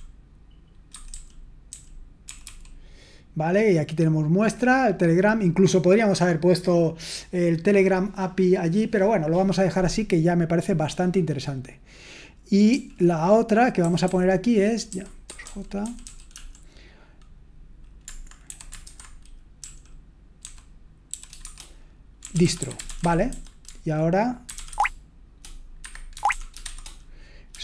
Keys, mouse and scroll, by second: 0.9-2.4 typing, 14.9-16.8 typing, 18.3-19.0 typing, 21.1-27.6 typing.